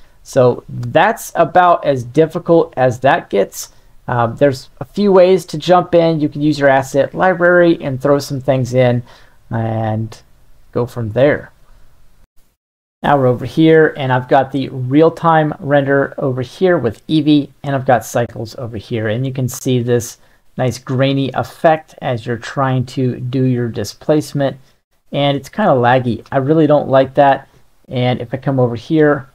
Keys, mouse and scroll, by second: 1.3-3.5 shift+drag, 4.2-6.8 middle drag, 7.7-11.2 middle drag, 28.0-29.3 middle drag.